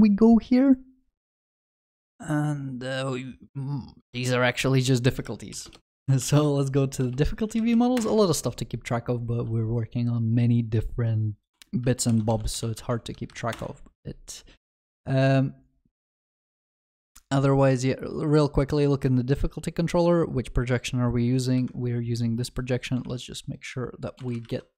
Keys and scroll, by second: 5.6 ctrl+shift+n, 12.1 ctrl+shift+n, 21.6 ctrl+b, 23.0 ctrl+d.